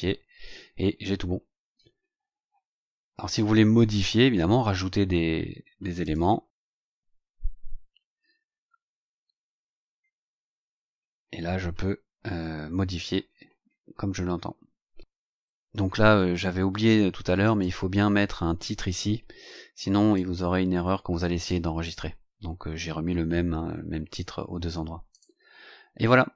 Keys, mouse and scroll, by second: 5.9 click, 8.9-9.2 scroll down 2, 10.9-11.6 scroll down 4, 17.3 click, 20.0-21.5 drag, 25.0 click.